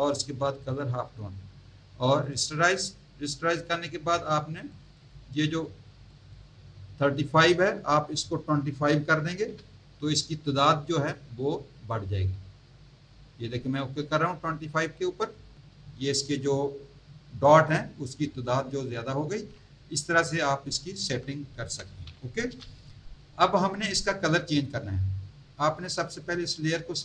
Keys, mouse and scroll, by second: 0.6 click, 2.2 click, 4.7 click, 6.1 click, 9.2 KP_2, 9.5 KP_5, 15.3 click, 19.3 z, 19.9 alt+click, 21.0 Tab, 22.5 v, 26.3 click.